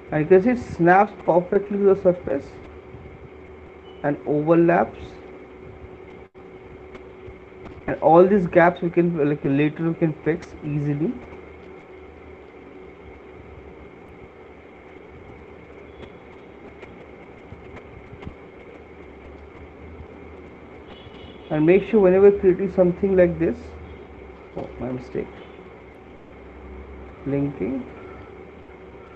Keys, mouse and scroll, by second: 0.2-5.1 drag, 5.8-10.6 drag, 11.3 click, 11.4 click, 17.2 click, 19.4 click, 22.0 click, 25.0 ctrl+z.